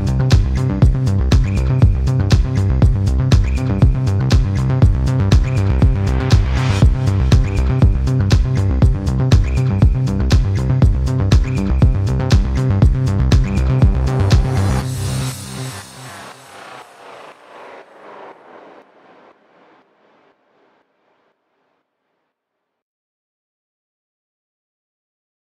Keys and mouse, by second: 5.2 click, 6.2-7.8 drag, 10.6 click, 12.0-17.4 drag, 18.0-19.1 middle drag, 20.9-25.5 drag.